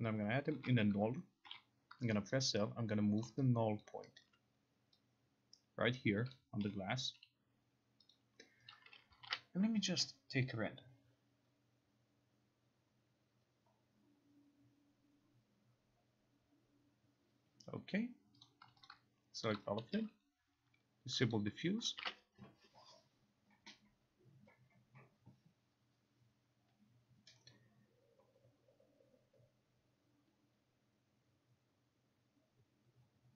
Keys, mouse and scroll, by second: 0.7 alt+g, 3.3 click, 3.9 alt+click, 4.3 alt+right click, 6.5 click, 8.2 click, 9.2 click, 9.3 ctrl+r, 18.5 click, 18.9 click, 19.5 shift+click, 21.4 click, 22.1 ctrl+r.